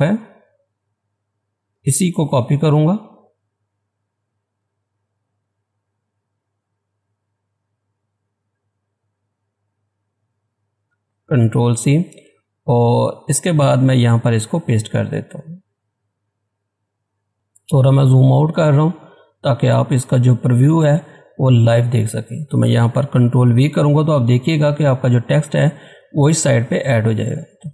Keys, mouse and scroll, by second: 11.3 ctrl+c, 12.1 click, 17.3 Return, 17.4 scroll down 1, 22.4-24.1 scroll down 1, 26.5-26.9 scroll down 1, 26.9 ctrl+v.